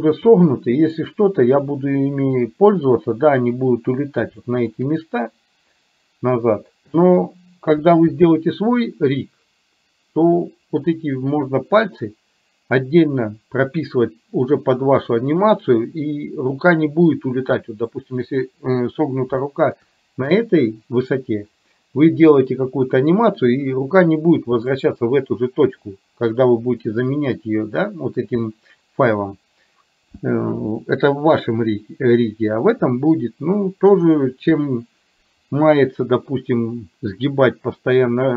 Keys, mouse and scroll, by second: 4.5 shift+middle click, 19.5 shift+middle click.